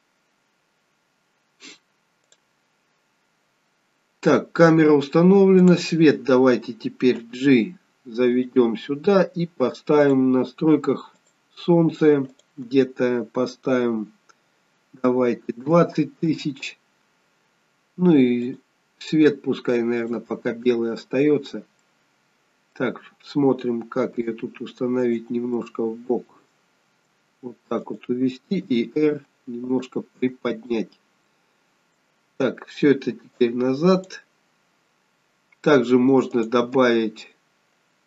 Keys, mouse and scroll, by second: 2.5 click, 2.8-3.1 scroll down 2, 5.7 click, 7.3 g, 10.1 click, 11.2 click, 12.4 click, 18.5 click, 21.6 scroll down 2, 21.9 middle click, 24.3 g, 25.7 middle click, 27.0 g, 28.7 r, 30.3-30.9 scroll up 3, 30.7 middle click, 33.4 click, 36.4 click.